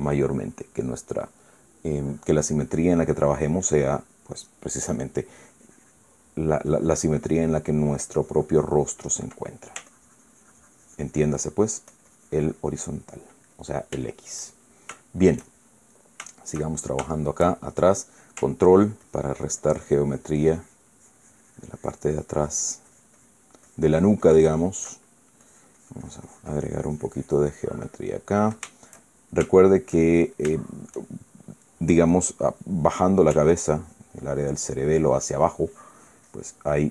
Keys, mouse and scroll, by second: 0.0 middle click, 3.3-5.1 drag, 5.4-7.2 drag, 7.4-10.0 drag, 10.1-10.6 middle drag, 10.6-14.1 ctrl+drag, 14.2 ctrl+middle click, 14.8 ctrl+shift+middle click, 15.7-18.6 shift+middle drag, 19.4-24.2 ctrl+drag, 24.4-25.6 ctrl+drag, 25.6 ctrl+middle click, 26.1-28.5 ctrl+drag, 28.6 middle click, 29.4 shift+middle click, 30.3-31.7 shift+middle drag, 34.2-36.9 ctrl+drag.